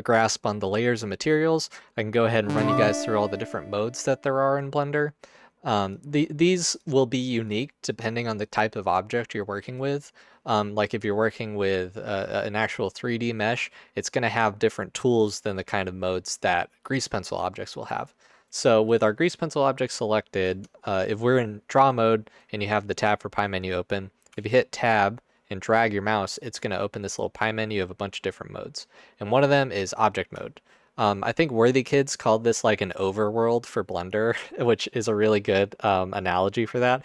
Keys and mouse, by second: 6.8 drag, 20.5 Tab, 24.3 Tab.